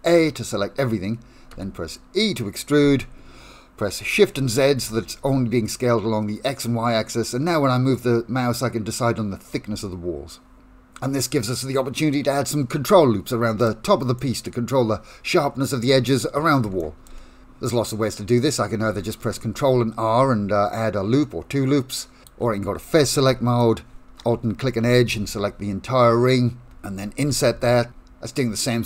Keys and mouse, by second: 1.6 e, 14.2-15.9 middle drag, 16.8 shift+middle click, 18.9 ctrl+r, 22.3 3, 27.3 i.